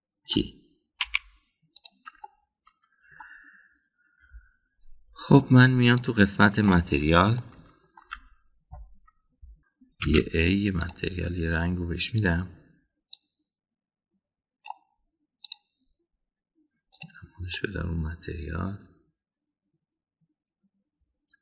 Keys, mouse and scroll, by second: 0.4-1.3 middle drag, 2.0 e, 3.2-4.2 middle drag, 8.4 middle click, 9.0 Tab, 11.0 a, 11.8 drag, 13.1 drag, 18.0 click, 18.5-21.4 middle drag.